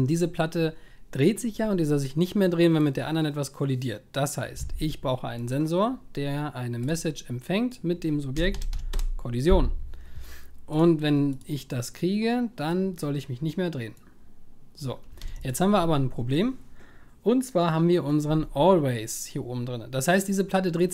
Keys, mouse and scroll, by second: 15.2 ctrl+s.